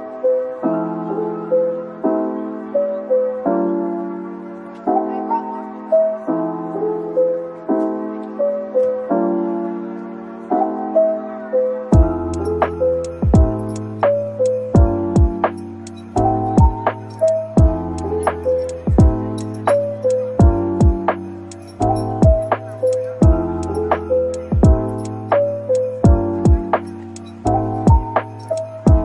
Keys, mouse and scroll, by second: 3.3-4.2 typing, 5.5-6.4 scroll down 1, 6.4 typing, 8.6 Tab, 9.4 typing, 10.1 shift+click, 11.9 shift+click, 13.3 ctrl+l, 15.1-17.8 scroll down 1, 17.9 ctrl+z, 25.5 shift+click, 28.3 shift+click, 28.5 ctrl+l.